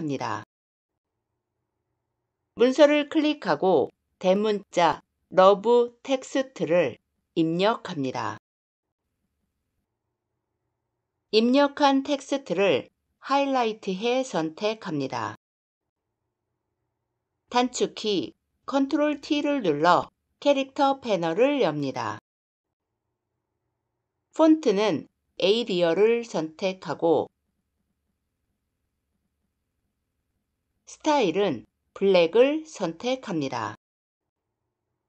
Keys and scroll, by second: 18.5 ctrl+t.